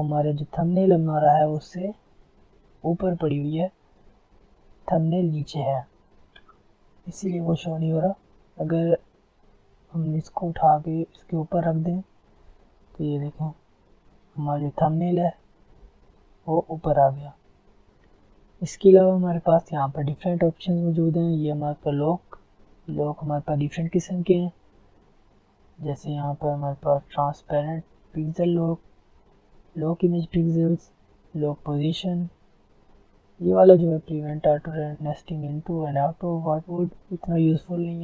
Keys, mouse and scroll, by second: 0.6 click, 8.9 click, 13.6 alt+scroll up 1, 14.5 alt+scroll up 1, 14.6 alt+scroll down 1, 14.7 alt+scroll up 1, 15.0 alt+scroll down 1, 16.2 alt+scroll up 1, 17.8 F10.